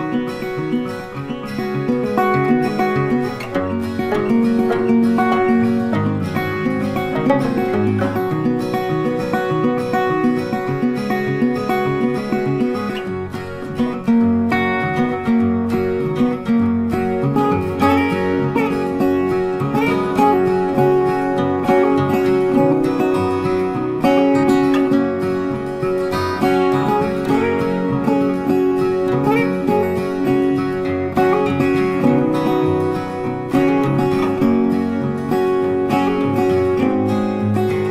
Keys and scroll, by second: 23.3 ctrl+t.